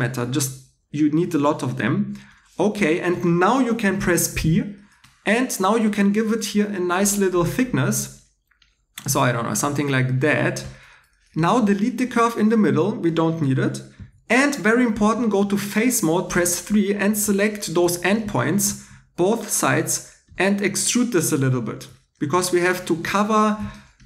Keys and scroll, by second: 3.8 p, 11.6 2, 13.3-14.5 typing, 23.4 Tab.